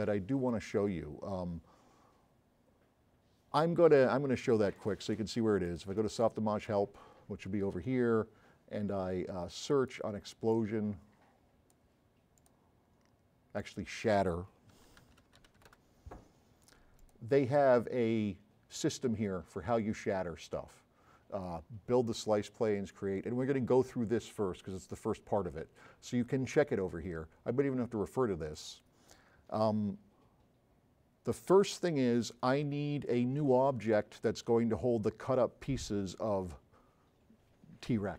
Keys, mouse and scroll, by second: 4.8 click, 5.7 click, 9.7 click, 10.8-11.8 drag, 12.4 click, 14.5-16.2 typing, 28.6 click.